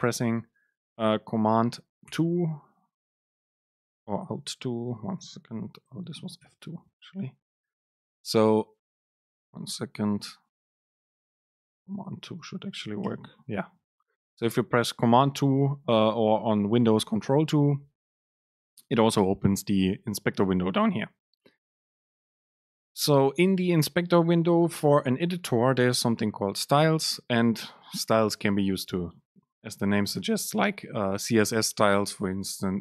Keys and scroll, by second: 5.3 alt+F2, 13.3 super+2, 29.7 super+space.